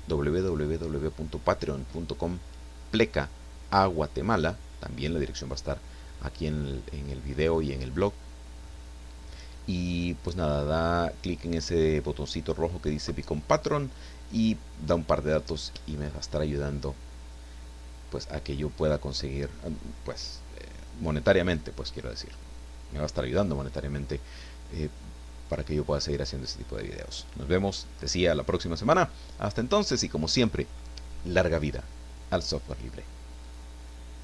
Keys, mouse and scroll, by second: 33.4 click.